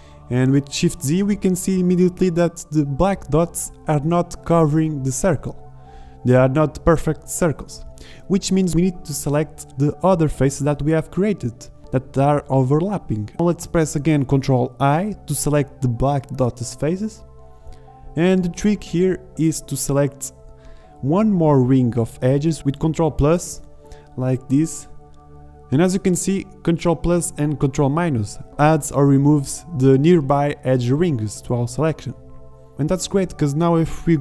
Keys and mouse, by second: 11.8 z, 14.5 ctrl+i, 20.9 ctrl+KP_Add, 23.4 z, 25.9 ctrl+KP_Subtract, 27.4 middle click, 27.5 middle click, 30.5 ctrl+KP_Add, 31.0 ctrl+KP_Subtract, 31.4 ctrl+KP_Add, 31.9 ctrl+KP_Subtract, 32.2 ctrl+KP_Add, 32.6 ctrl+KP_Subtract, 33.2 ctrl+KP_Add.